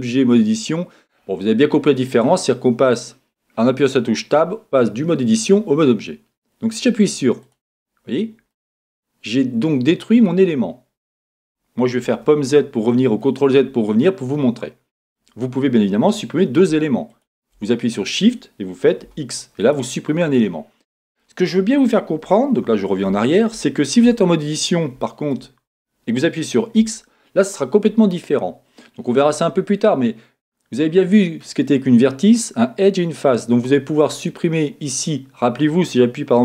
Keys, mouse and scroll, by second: 8.7-17.1 middle drag, 12.0 z, 15.2-17.1 scroll up 2, 17.1 scroll up 1, 17.1 shift+click, 19.0 x, 20.4-34.4 middle drag, 20.8 scroll down 1, 22.6 z, 24.1 Tab, 25.6-26.8 scroll up 2, 26.8 x, 34.3 click.